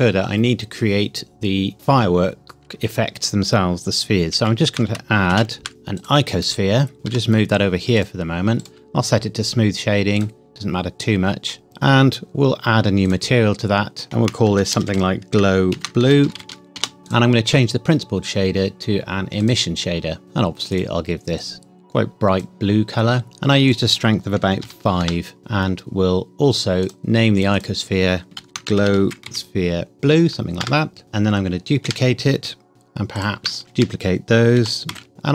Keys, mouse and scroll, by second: 5.3 shift+a, 6.0 click, 6.9 scroll up 1, 7.1 g, 8.0 click, 8.6 right click, 10.2 click, 14.0 shift+Num_Lock, 14.0 click, 14.1-16.4 typing, 16.8 Return, 17.1 click, 19.4 click, 23.7 click, 24.6 KP_5, 25.0 KP_Enter, 26.8 click, 28.4-31.0 typing, 30.6 KP_Enter, 31.8 Escape, 32.7 click, 33.6 shift+d, 33.7 Escape, 34.6 g, 34.9 x, 35.1 click.